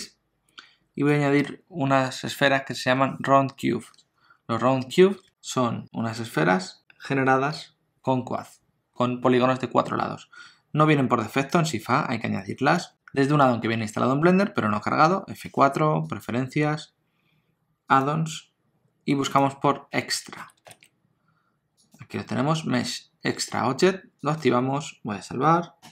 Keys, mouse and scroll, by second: 0.4 scroll down 2, 1.1 middle click, 11.2 shift+a, 15.1 F4.